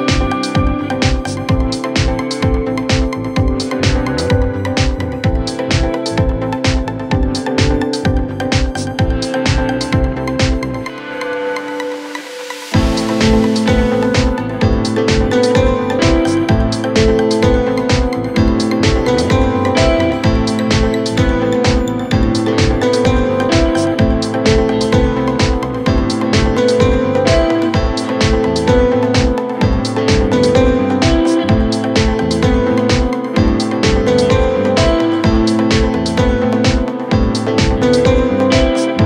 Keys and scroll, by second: 11.3 F3, 23.7 F3, 24.0 Escape.